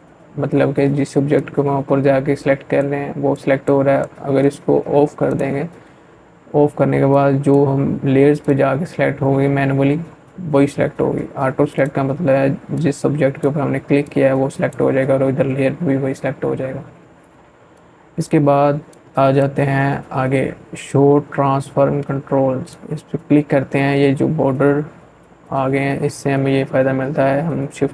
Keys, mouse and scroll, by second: 9.6-15.2 drag, 15.5 click, 15.6-19.7 drag, 20.5 click, 25.7-27.9 drag.